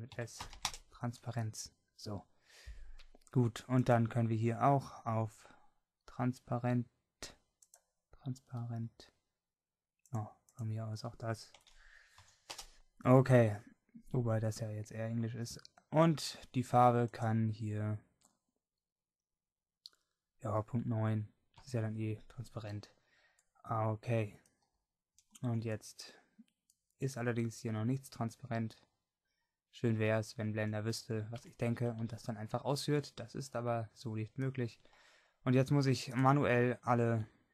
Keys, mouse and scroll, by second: 19.7-23.2 drag, 19.7-23.2 right drag, 23.2 middle click, 25.5 middle click, 31.9 Tab.